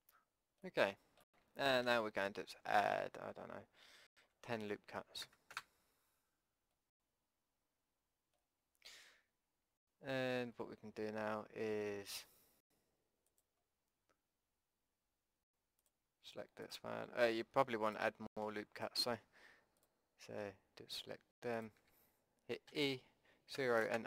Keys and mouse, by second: 0.2 middle click, 0.5-2.9 drag, 1.8 a, 2.9 ctrl+r, 6.8 click, 9.8 middle click, 13.3-15.2 drag, 15.2 middle click, 15.8-22.7 drag, 22.7 e, 23.5-24.0 middle drag.